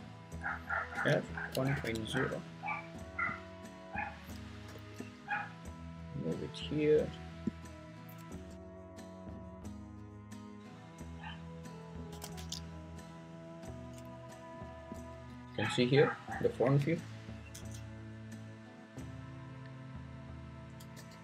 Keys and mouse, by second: 0.9 r, 1.5 1, 1.7 8, 1.8 0, 2.0 Return, 4.7 l, 4.9 g, 7.2 click, 8.5 s, 9.7 s, 9.9 x, 11.7 click, 12.1 s, 12.3 z, 13.5 click, 14.5 click, 16.8 g, 17.5 x, 20.9 g.